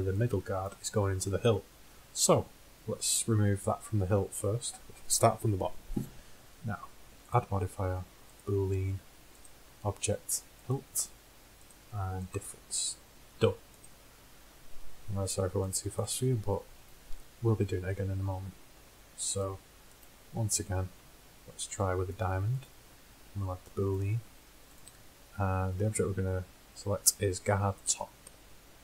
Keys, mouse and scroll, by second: 7.3-9.2 drag, 9.5-11.2 drag, 11.7-13.6 drag, 13.9-15.8 drag, 17.9-18.4 middle drag, 21.2-22.3 drag, 22.7-24.6 drag, 24.8-26.7 drag.